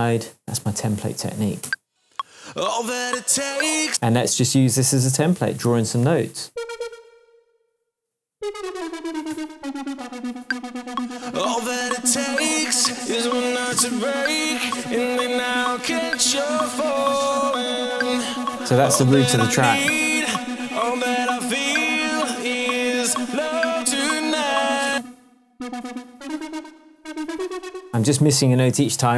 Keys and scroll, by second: 1.6 space, 3.8 space, 5.6 p, 8.3 Down, 10.4 space, 24.8 space, 25.8 alt+space.